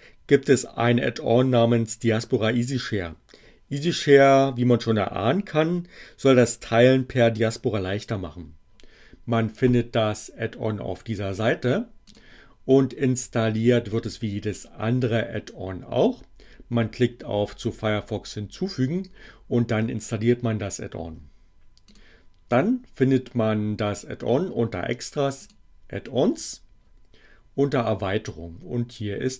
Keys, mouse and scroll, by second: 12.0 click, 21.8 click, 25.4 click.